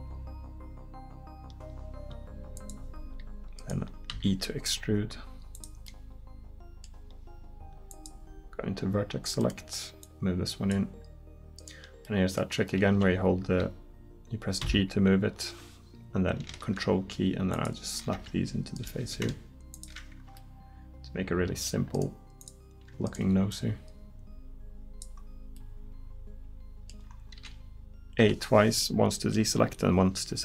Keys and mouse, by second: 4.1 e, 9.4-12.1 right drag, 14.6 g, 18.8 right click, 19.0 g, 22.4 right click, 26.8 middle click, 27.4 a, 28.3 a.